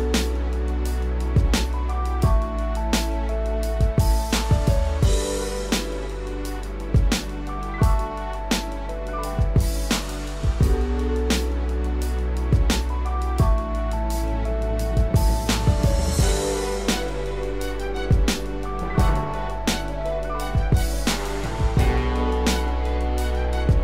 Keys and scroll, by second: 5.6 ctrl+z.